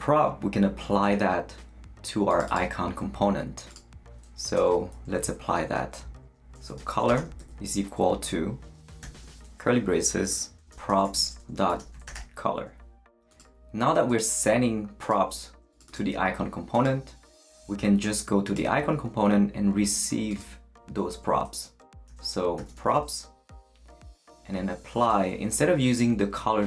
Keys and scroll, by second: 6.4-7.9 typing, 9.0 shift+[, 10.3-12.6 typing, 21.8-23.4 typing.